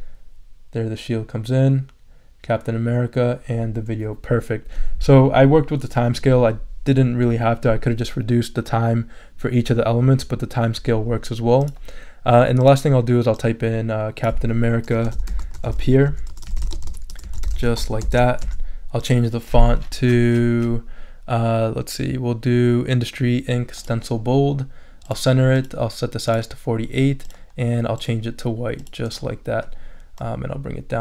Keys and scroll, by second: 14.9-18.5 typing, 19.2 super+a.